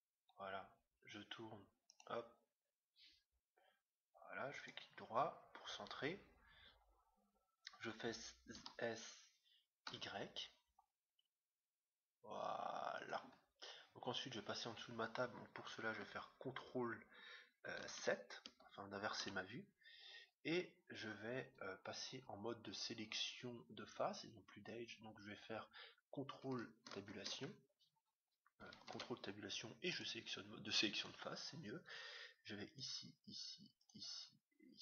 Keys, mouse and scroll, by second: 8.5 s, 13.3-15.2 middle drag, 20.7-22.6 middle drag, 26.9 ctrl+Tab, 30.9-32.6 right drag.